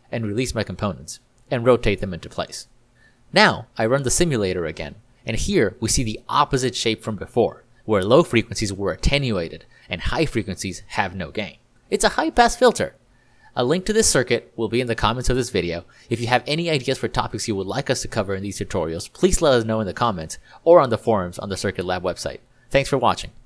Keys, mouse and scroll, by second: 2.1 click, 3.4 r, 3.6 r, 3.7 r, 5.4 click, 14.5 ctrl+d, 14.7 ctrl+d, 15.4-15.8 ctrl+d, 17.0 click, 21.3 ctrl+click.